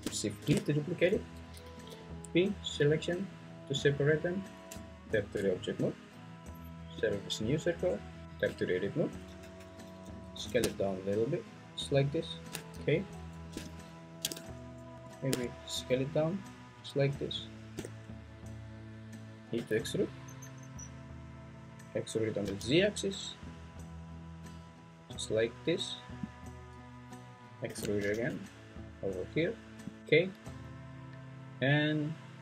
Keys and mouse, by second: 0.4 shift+d, 1.6 Escape, 1.9 p, 4.7 Tab, 7.9 Tab, 9.4 a, 10.3 s, 12.7 `, 14.9 s, 17.4 shift+click, 19.6 e, 22.4 z, 27.7 e, 28.0 z.